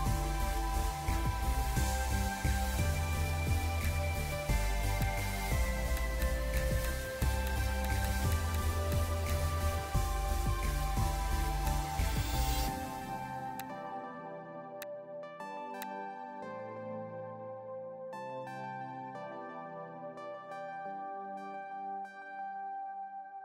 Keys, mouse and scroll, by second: 1.0 scroll up 1, 2.4 [, 2.5 [, 4.4 [, 4.5 [, 6.1 double click, 7.9 double click.